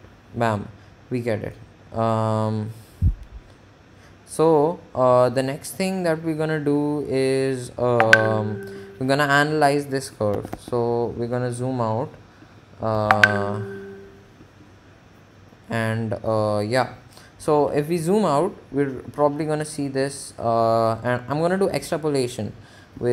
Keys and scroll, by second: 10.3 Menu, 10.8 4, 18.5 Escape.